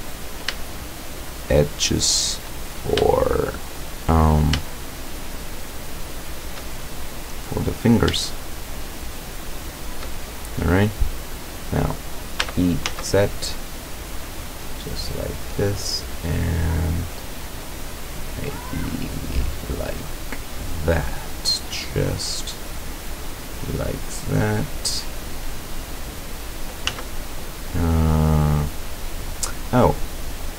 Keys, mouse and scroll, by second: 0.1 right click, 1.3 shift+right click, 2.7-3.0 shift+scroll up 1, 3.1-4.0 shift+middle drag, 5.1 shift+right click, 6.2 shift+right click, 7.2-8.1 middle drag, 8.5 shift+right click, 9.2 shift+right click, 9.6 shift+right click, 10.3-10.6 shift+scroll down 3, 10.8-12.0 middle drag, 12.5 e, 12.9 z, 15.2 click, 16.2-17.0 middle drag, 17.6-19.7 drag, 19.8 scroll down 1, 20.1 click, 20.7 click, 22.1 click, 22.3-22.7 scroll down 2, 22.5 click, 22.8-24.9 drag, 24.9-25.9 scroll up 2, 25.4 click, 26.7 click, 26.9 z, 27.3-29.4 drag, 30.4 click.